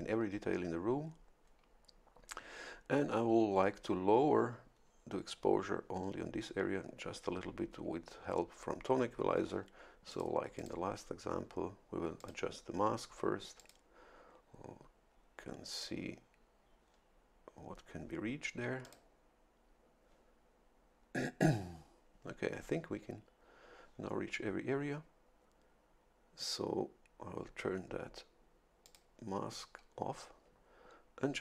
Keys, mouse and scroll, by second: 10.1 click, 10.6 click, 12.2 click, 13.6 click, 15.7 click, 18.8 click, 28.8 click.